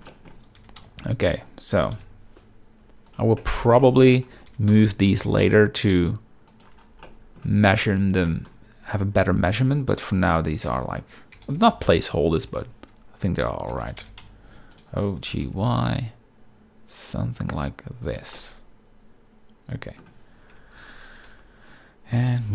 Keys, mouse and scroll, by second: 0.1 shift+middle click, 0.5 g, 0.8 x, 1.7 g, 1.9 y, 3.1 click, 3.4 shift+middle click, 3.4-4.1 shift+scroll, 3.8-4.1 middle drag, 4.5 g, 4.7 x, 6.5 shift+click, 7.0-7.4 middle drag, 8.3 shift+middle drag, 8.3 shift+scroll, 9.2-10.4 middle drag, 10.7 Tab, 11.3 g, 11.6 y, 12.4 click, 12.5 Tab, 13.7-15.5 typing, 14.7 right click, 18.0 click, 18.3-20.0 middle drag, 20.5 Tab, 21.2 g, 22.2 g, 22.2 y.